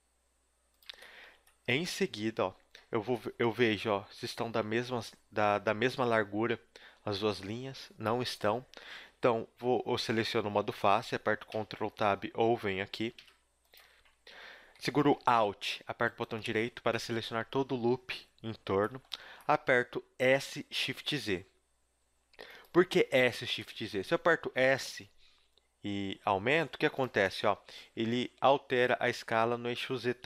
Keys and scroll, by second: 0.9 a, 11.5 ctrl+Tab, 13.2 ctrl+Tab, 20.2 s, 24.5 s, 29.7 KP_3, 30.1 z.